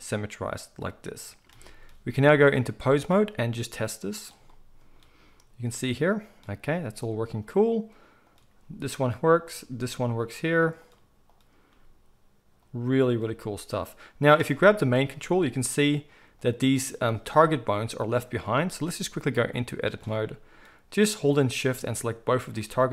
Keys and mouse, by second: 4.2-6.3 middle drag, 5.2 g, 6.3 click, 6.3-8.3 middle drag, 6.6 g, 8.3 click, 8.5-9.5 middle drag, 8.5 g, 9.5 click, 9.6-10.8 middle drag, 9.6 g, 10.8 click, 10.8 middle click, 11.3-11.7 drag, 11.7-13.0 middle drag, 11.7 g, 13.0 click, 13.1-19.3 middle drag, 13.2 g, 15.1 g, 17.2 g, 19.3-21.1 drag, 21.1-22.9 middle drag.